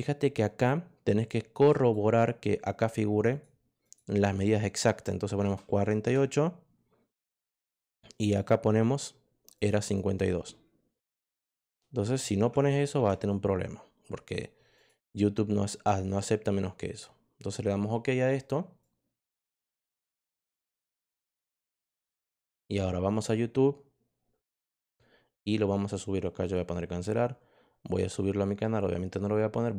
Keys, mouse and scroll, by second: 1.1 click, 3.2 click, 3.8 click, 5.3 BackSpace, 6.0 8, 8.1 click, 9.5 click, 10.9 BackSpace, 11.4 BackSpace, 12.3 5, 12.9 2, 14.7 click, 18.7 click, 23.1 click, 24.6 click, 27.8 click.